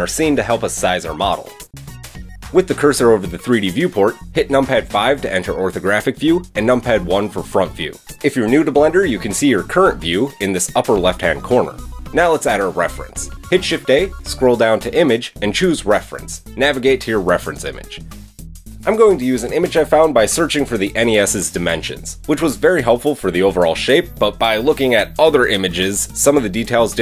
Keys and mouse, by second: 1.0-12.3 drag, 5.2 KP_5, 5.7 KP_1, 12.5 shift+a, 25.2 click.